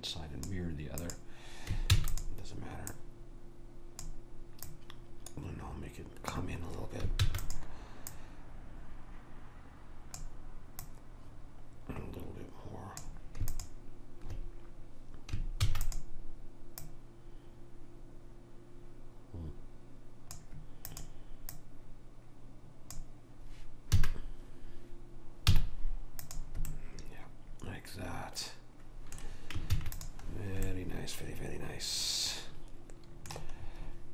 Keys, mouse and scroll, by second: 1.1-6.6 drag, 2.0 shift+d, 7.3 shift+d, 8.2 click, 10.9 click, 13.6 click, 15.8 shift+d, 16.9 click, 21.0 click, 24.0 a, 25.6 z, 29.8 ctrl+s.